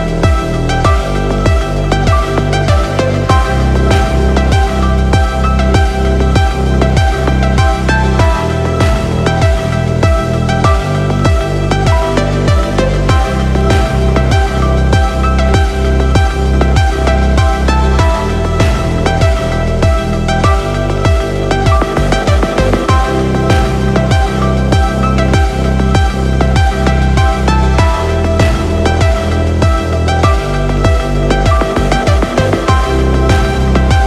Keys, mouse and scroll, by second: 5.3-7.4 drag, 8.9 n, 9.6 click, 10.1-10.9 scroll up 2, 10.9-11.9 scroll down 1, 12.0 click, 12.4 n, 13.6 middle click, 15.4 KP_0, 19.2-20.5 drag, 21.2 click, 21.3-22.5 drag, 22.7 shift+middle drag, 23.1 scroll up 1, 23.2 shift+middle click, 24.3 click, 24.3 n, 24.5 middle drag, 24.8 scroll up 2, 24.9-25.4 middle drag, 25.5 scroll down 2, 25.9 shift+s, 26.5 shift+a.